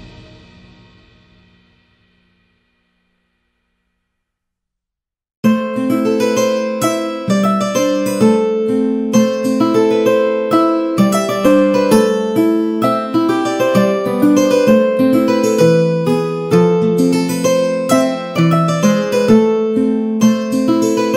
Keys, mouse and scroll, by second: 2.0 click, 7.6 middle click, 8.0 a, 8.1 a, 8.4 shift+middle click, 8.8 middle click, 9.3 click, 9.5 Tab, 11.1 click, 11.1 2, 11.6 shift+click, 12.1 shift+click, 13.7 middle click, 14.1 shift+middle click, 15.1 g, 19.1 Tab, 19.7 a, 19.7 a, 19.8 middle click, 20.7 click, 21.0 shift+middle click.